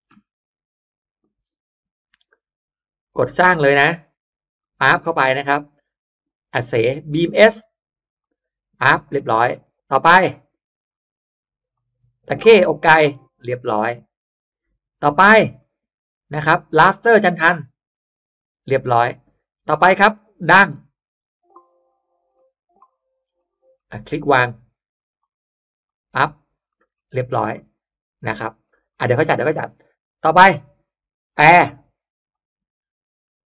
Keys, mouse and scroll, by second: 1.1-2.1 drag, 3.1 click, 4.5 click, 6.1 click, 7.0 click, 8.1 click, 8.9 middle click, 9.1 scroll down 1, 9.9 click, 10.8 click, 11.6 click, 12.6 click, 13.3 middle click, 15.3 click, 16.5 click, 17.4 click, 18.9 click, 19.9 click, 20.9 click, 21.8-22.3 drag, 22.3-22.7 middle drag, 22.5-22.8 scroll up 1, 23.3 click, 23.7 middle click, 24.1-24.5 scroll up 1, 24.9 click, 25.7 click, 26.6 middle click, 27.4-28.5 middle drag, 28.9 middle click, 29.2 scroll down 1, 30.3 click, 31.2 click, 32.2 click.